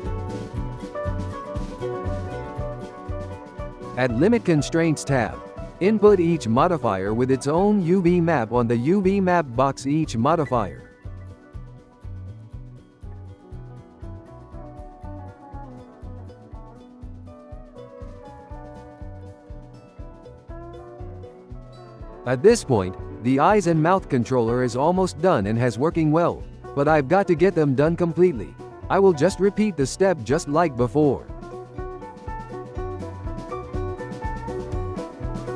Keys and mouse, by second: 1.3 click, 3.5-5.3 drag, 6.3-10.4 drag, 10.4-11.6 ctrl+middle drag, 11.6 click, 12.3 click, 12.7 click, 13.7 g, 16.7-17.4 shift+middle drag, 17.4 click, 17.7 click, 18.4 g, 24.2 click, 24.6-25.2 shift+middle drag, 25.2 g, 28.2 g, 29.3 g, 31.5 click, 31.9 g, 34.1 click.